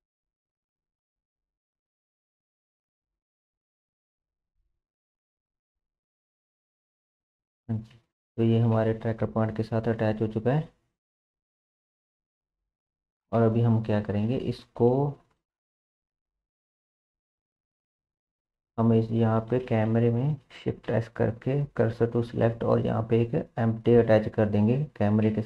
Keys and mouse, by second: 0.0 g, 1.3 click, 1.8 g, 5.2 click, 5.4 g, 6.6 click, 6.9 g, 8.0 Tab, 10.5-11.0 drag, 13.3 KP_7, 15.3 shift+middle drag, 16.6-17.7 middle drag, 17.3 Delete, 20.9 shift+s, 22.7 shift+a, 25.3 s.